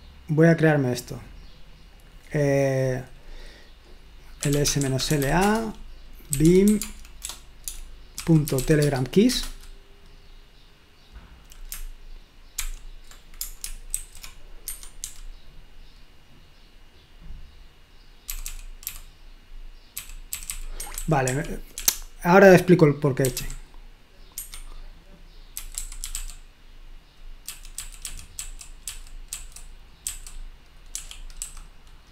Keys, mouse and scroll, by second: 1.9 click, 4.2-9.0 typing, 9.3 Return, 12.6 o, 13.9 ctrl+alt+v, 14.7 Escape, 15.0 j, 18.3-21.7 typing, 23.0-23.8 typing, 24.3 Escape, 25.4-31.4 typing.